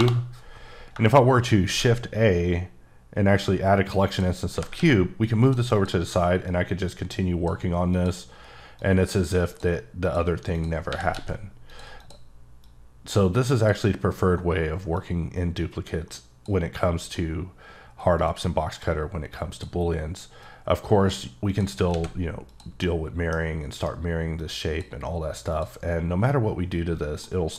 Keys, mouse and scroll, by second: 0.0 Return, 1.6 shift+a, 4.0 click, 4.5 g, 4.7 x, 5.4 click, 5.7 click, 6.5 click, 7.9 click, 8.8 click, 10.2 click, 10.5 click, 10.9 r, 11.1 x, 11.7 click, 12.0 click, 12.6 click, 13.5 click, 14.9 click, 17.0 click, 18.2 click, 19.5 click, 20.4 click, 21.5 click, 21.9 alt+x, 22.5 click, 23.1 middle click, 23.3 scroll up 3, 23.8 right click, 24.5 click, 25.5 click, 26.0-26.7 scroll down 2, 26.7 scroll up 2, 27.2 middle click.